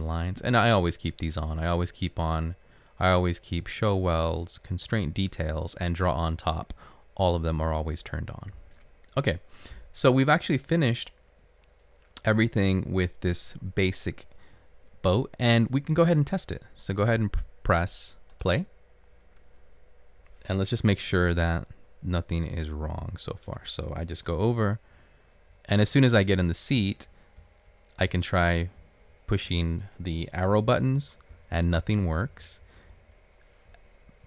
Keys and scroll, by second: 24.5 Up, 25.1 Up, 26.8 Left, 28.2 Right, 28.3 Up, 30.5 Up, 30.5 Down, 30.6 Right, 31.8 Down, 31.9 Up, 32.7 Right, 32.7 Left, 32.8 Up, 32.8 Down.